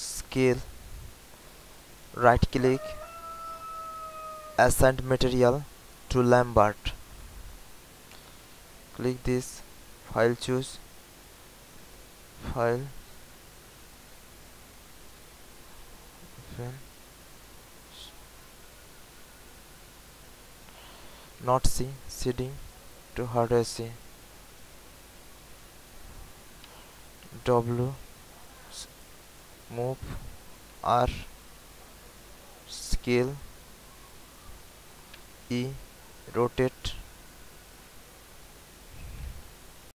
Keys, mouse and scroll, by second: 1.3-6.6 right drag, 8.3 click, 21.8-25.4 drag, 25.7 alt+click, 26.6 alt+w, 27.8-30.7 drag, 30.7 r, 31.7 w, 32.8-35.1 drag, 35.2 e, 36.1-39.1 drag.